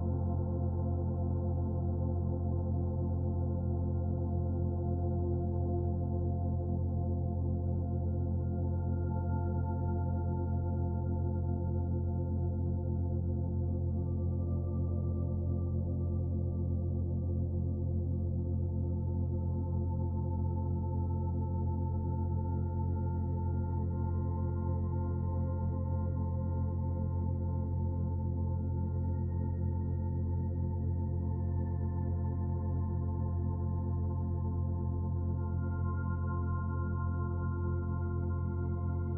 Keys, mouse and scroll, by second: 19.5 click, 22.3 g, 30.5 click, 31.9 click, 36.3 click.